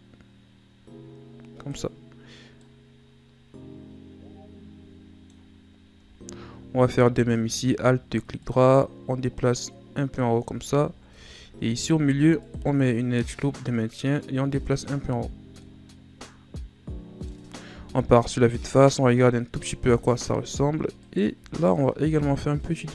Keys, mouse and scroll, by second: 2.6-5.6 middle drag, 6.1-6.4 ctrl+scroll down 3, 6.4-7.3 scroll up 1, 7.3 alt+right click, 8.4 click, 10.4 Tab, 11.1 Tab, 11.9 ctrl+r, 13.6 click, 15.1 Tab, 15.4 scroll down 3, 15.6-17.8 middle drag, 17.8 KP_1, 18.7-19.5 ctrl+scroll up 6, 19.5 Tab, 21.0 alt+right click, 21.7 click.